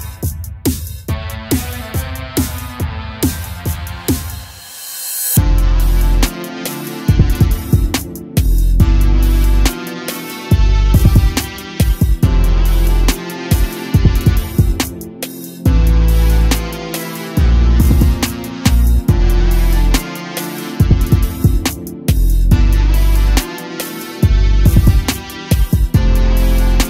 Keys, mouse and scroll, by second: 1.6 g, 5.2-5.7 scroll down 1, 5.7 shift+d, 6.2 g, 9.0 click, 13.4 g, 14.8 a, 15.0 a, 16.1-16.9 scroll up 1, 16.9-19.1 scroll up 1, 21.4 click, 23.4 click, 24.5-26.8 drag.